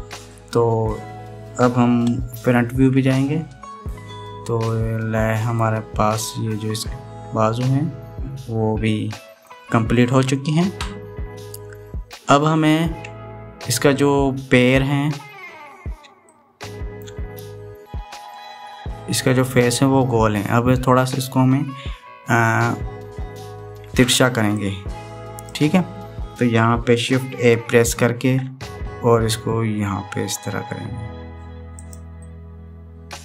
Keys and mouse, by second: 3.5 KP_1, 5.4 middle click, 7.0-10.2 middle drag, 10.8-12.9 middle drag, 11.9 click, 11.9 right click, 17.0 shift+middle click, 19.2 middle click, 25.6 click, 29.0 ctrl+a, 33.0-33.2 middle drag.